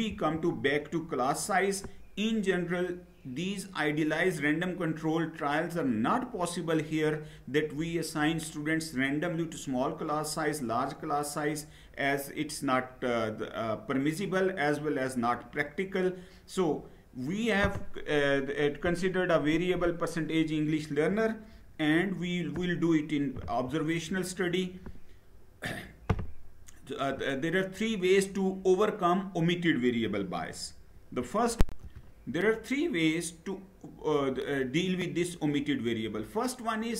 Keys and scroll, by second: 21.3 Down, 23.1 Down, 31.2 shift+F9.